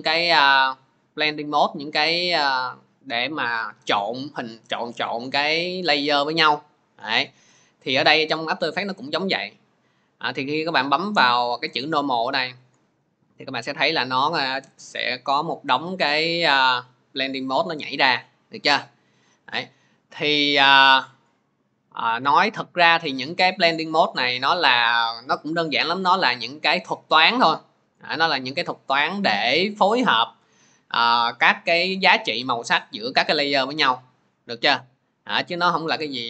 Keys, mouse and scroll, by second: 12.0 click.